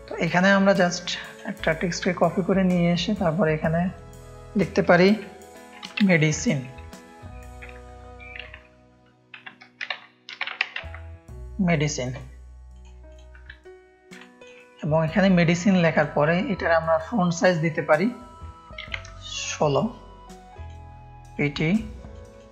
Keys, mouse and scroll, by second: 0.4 alt+click, 1.6 ctrl+click, 1.7 ctrl+space, 2.4 click, 3.5 click, 6.0 shift+m, 6.4 e, 7.6 BackSpace, 7.9 Caps_Lock, 9.4-11.3 typing, 12.7 click, 13.0 click, 14.1 ctrl+click, 14.2 ctrl+space, 14.7-16.8 drag, 17.2 click, 18.6 KP_1, 18.8 KP_6, 19.1 Return, 20.5 click, 21.3 click.